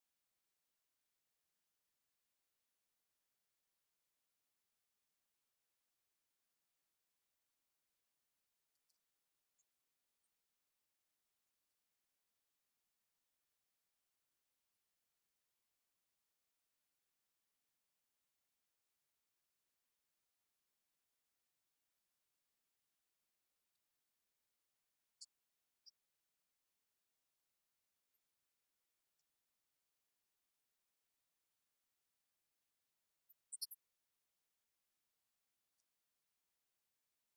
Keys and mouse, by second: 4.8 right click, 8.8 click, 10.9-14.3 drag, 23.0 click, 23.6 click, 27.0 click, 30.4-32.9 drag, 33.3 click, 35.5-37.3 drag.